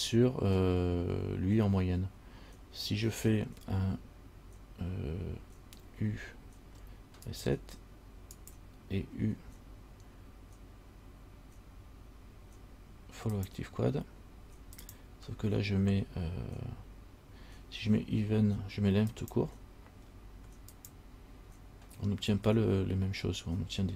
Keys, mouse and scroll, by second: 6.0 u, 9.3 u.